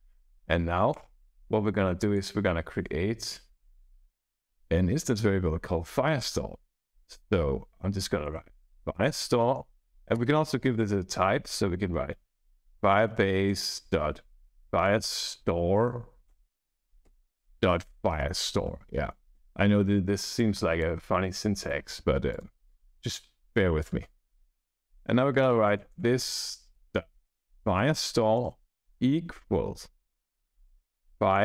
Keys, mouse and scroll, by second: 0.8 Return, 1.9 click, 3.1 Return, 3.6 Up, 7.7-10.1 typing, 12.1-18.6 typing, 18.0 Return, 20.3 click, 21.5 click, 22.2 click, 24.6-27.6 typing, 28.0 Down, 28.3 Return, 28.6-31.4 typing.